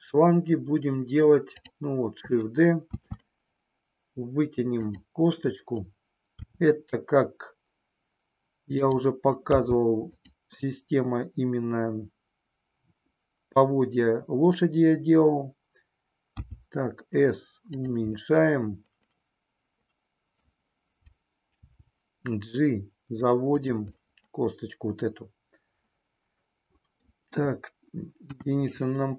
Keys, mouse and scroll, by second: 3.0 shift+d, 6.4 r, 8.9 click, 9.5 g, 16.4 s, 18.4-20.4 middle drag, 21.6 g, 24.0-28.1 middle drag, 28.1 KP_1.